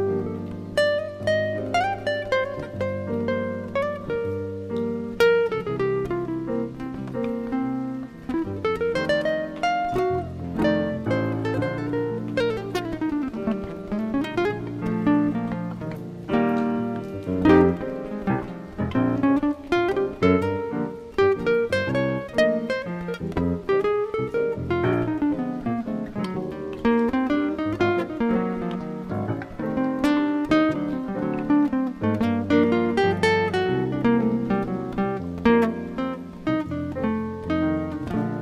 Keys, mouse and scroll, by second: 0.4 ctrl+e, 5.8 a, 6.3 scroll down 5, 7.1 shift+middle click, 9.8 click, 10.4-12.4 scroll up 15, 15.4 click, 23.9 middle click, 28.6 middle click, 34.0 middle click.